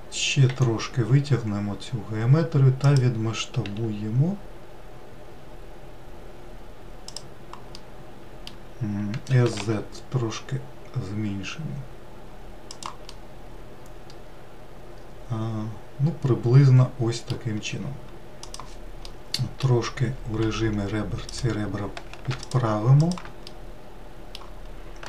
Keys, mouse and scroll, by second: 1.4 e, 4.5 s, 8.6-10.2 middle drag, 10.2 s, 14.0-17.0 middle drag, 20.3-21.6 middle drag, 21.6 2, 22.5 click, 23.6 shift+click, 24.2 shift+click, 24.7-25.0 middle drag.